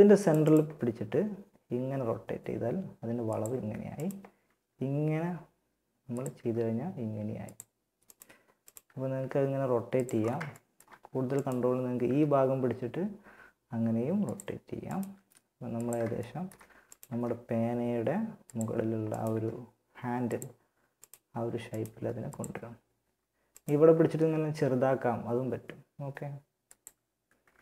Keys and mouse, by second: 0.1 r, 3.2-5.1 drag, 3.7 r, 5.5 g, 7.3 click, 8.2 r, 11.2 g, 14.3 g, 16.3 g, 18.4 g, 21.1 g, 23.3 s, 26.6 Tab.